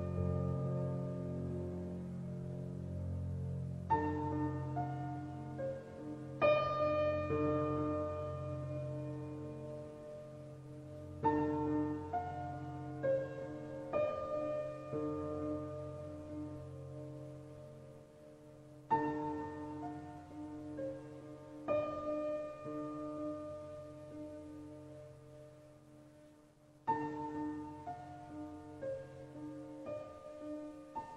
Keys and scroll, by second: 7.7 Up.